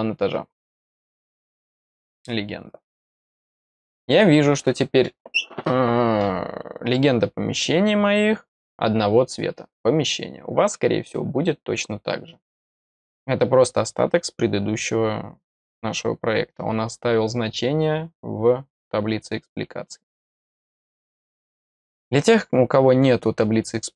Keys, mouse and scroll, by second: 0.4 scroll up 1, 0.5 middle click, 0.5 scroll down 1, 0.7-1.3 scroll up 2, 1.2 middle click, 1.7 click, 1.9 click, 3.1 click, 23.7-23.9 scroll down 3.